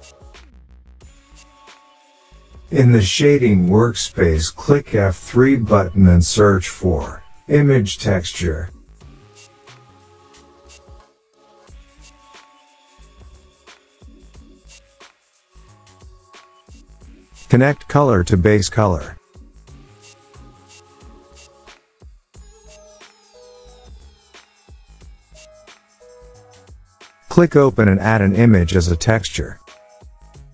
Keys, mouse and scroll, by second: 2.0 click, 3.5 F3, 7.5-11.0 typing, 13.2 click, 14.4 click, 19.1 click, 25.9 click, 27.1 click, 27.6 click, 28.8 click.